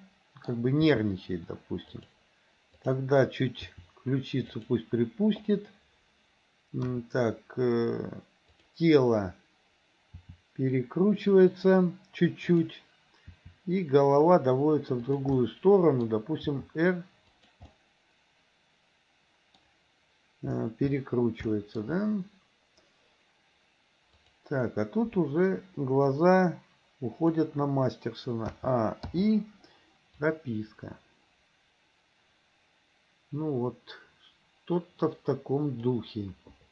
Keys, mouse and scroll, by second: 0.9 g, 2.8 click, 3.8 r, 6.9 KP_1, 10.1 r, 12.5 click, 13.3 r, 15.5-16.1 middle drag, 16.6 r, 17.8-19.6 middle drag, 21.5 shift+middle click, 24.2 click, 26.3-27.5 drag, 28.6 a, 29.2 i, 30.4-36.7 drag.